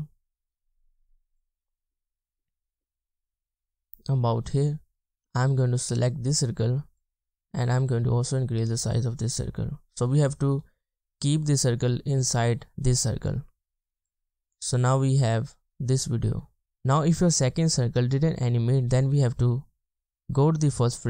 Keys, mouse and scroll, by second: 15.6 space, 16.4 space, 16.6-19.1 scroll up 1.